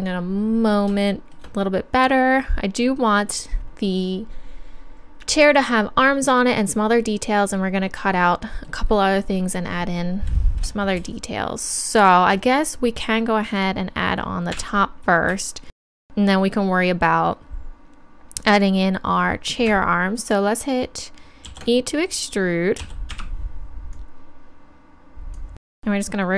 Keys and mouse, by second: 13.6 right click, 14.5 KP_1, 21.5 ctrl+e, 22.8 e, 23.9-25.8 drag, 25.7 r.